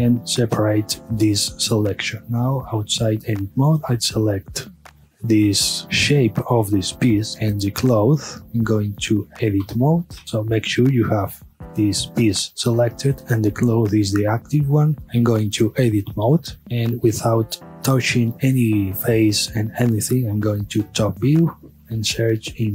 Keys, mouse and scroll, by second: 0.2 p, 1.6-2.2 middle drag, 2.2 Tab, 2.9 click, 5.3-7.3 middle drag, 7.8 shift+click, 9.7 Tab, 10.7-13.2 middle drag, 15.7 Tab, 17.2-20.9 middle drag, 20.9 KP_7.